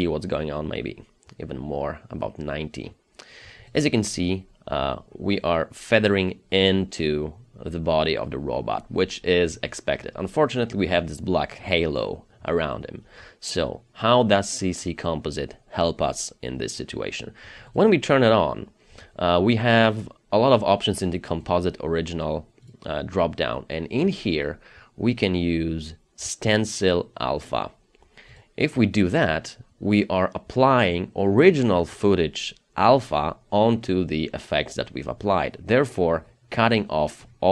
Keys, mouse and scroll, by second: 4.1-5.2 scroll up 1, 5.2-6.4 scroll down 1, 13.4-14.8 scroll down 1.